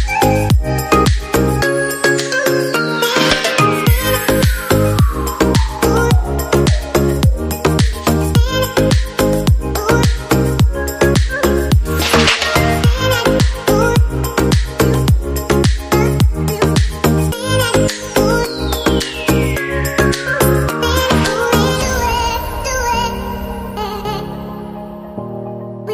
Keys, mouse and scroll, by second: 5.4 shift+click, 22.1 right click.